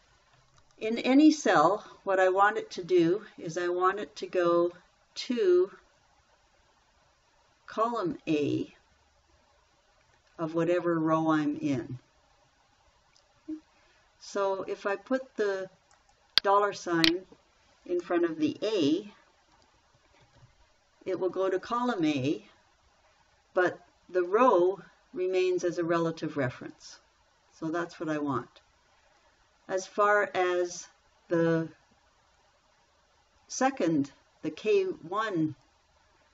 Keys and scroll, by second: 20.8 shift+4.